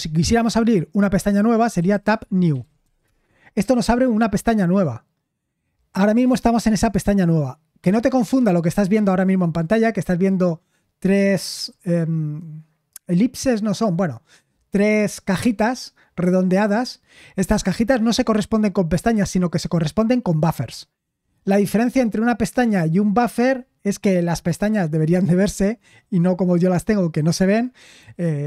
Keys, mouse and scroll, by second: 2.5-3.0 typing.